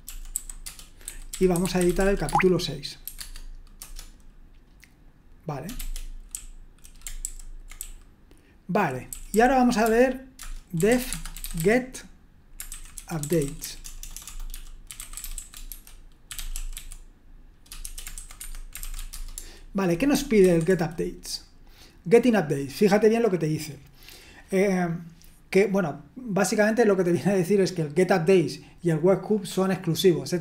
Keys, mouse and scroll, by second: 0.0-4.3 typing, 5.8-19.3 typing, 7.2 ctrl+u, 20.4 super+1.